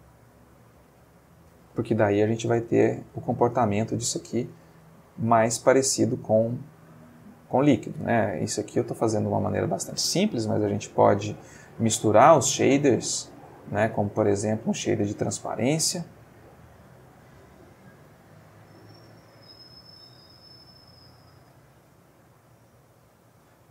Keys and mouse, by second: 2.2 Left, 4.7 Right, 9.0 click, 10.5 shift+a, 13.4 click, 14.0 click, 14.4 shift+a, 17.4 click, 18.1 click, 18.9-20.0 drag.